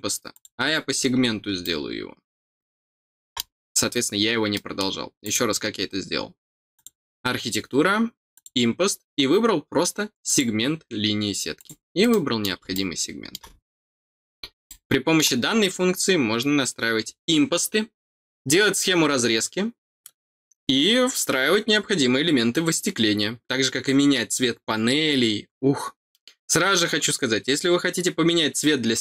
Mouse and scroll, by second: 0.3 click, 1.6-3.3 middle drag, 3.4-4.5 scroll down 1, 4.5 middle click, 5.2 click, 6.7 click, 8.3 click, 10.2 click, 11.5 click, 12.0 middle click, 12.7 middle click, 14.6 middle click.